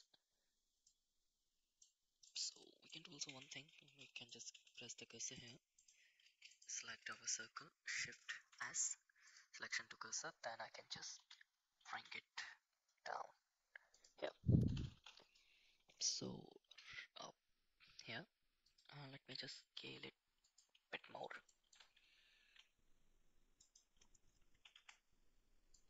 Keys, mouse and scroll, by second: 0.8-1.8 middle drag, 2.2 click, 2.5 middle click, 3.2 Tab, 3.8 shift+s, 4.5 Tab, 5.3 click, 5.7 click, 6.2 shift+z, 6.4 click, 7.0 shift+z, 7.3 shift+a, 8.4 shift+s, 9.6 middle click, 10.5 g, 14.6 KP_1, 14.9 shift+z, 16.5 g, 19.1 s, 21.5 middle click, 22.3 s, 24.7 s.